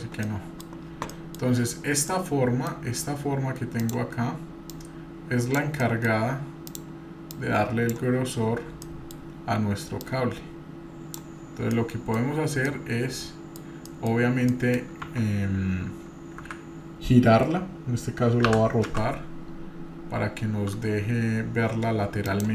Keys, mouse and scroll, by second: 0.2 middle click, 0.9 scroll down 1, 1.1-1.5 middle drag, 1.5-2.1 scroll down 3, 2.1-2.7 middle drag, 2.9-3.6 scroll up 2, 3.6 scroll up 1, 3.8 click, 4.8-5.6 drag, 5.8 middle click, 6.7 click, 7.3-7.9 drag, 8.1-8.8 scroll up 4, 8.8-9.2 middle drag, 10.0-11.2 drag, 11.7-12.4 shift+middle drag, 12.7-13.6 middle drag, 13.9 middle click, 14.5 middle click, 15.0 Tab, 16.9 a.